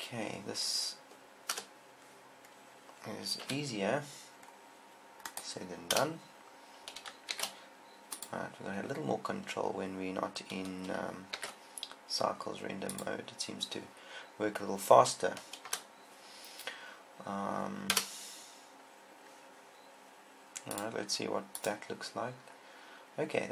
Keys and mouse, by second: 2.0 KP_0, 4.1 z, 6.1-7.3 drag, 6.3 KP_0, 7.7 shift+f, 8.6 click, 11.7 shift+f, 13.3-14.3 drag, 16.1 KP_0, 18.3 KP_0, 21.9 click, 22.9-23.5 middle drag.